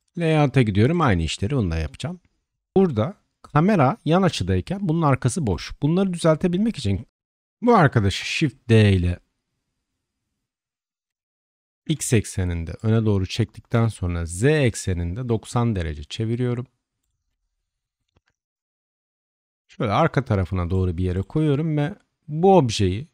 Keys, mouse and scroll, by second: 0.9-1.9 shift+drag, 2.7-3.1 shift+middle drag, 5.5 click, 7.1 Tab, 8.1 shift+d, 13.2 r, 18.1-21.1 drag.